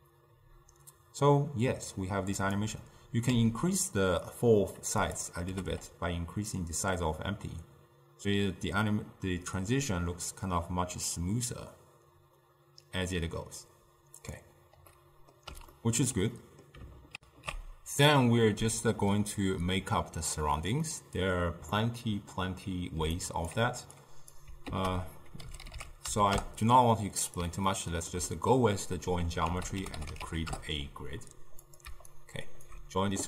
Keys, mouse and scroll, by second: 3.4 s, 5.6 g, 14.9 scroll down 1, 15.0 middle click, 15.8-16.4 scroll up 3, 16.4-17.2 middle drag, 17.2 ctrl+alt+shift+w, 20.9-23.1 middle drag, 23.1 d, 23.2 right click, 23.6 d, 24.0 click, 24.8 ctrl+a, 27.8-29.5 ctrl+middle drag, 29.5 ctrl+a, 32.2-33.2 alt+right drag.